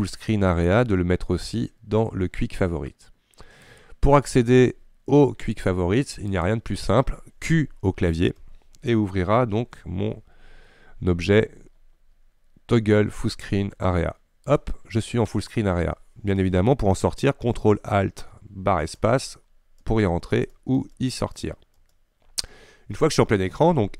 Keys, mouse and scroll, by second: 19.0 ctrl+alt+space, 19.9 ctrl+alt+space, 20.4 ctrl+alt+space, 20.9 ctrl+alt+space, 21.3 ctrl+alt+space, 21.8 ctrl+alt+space.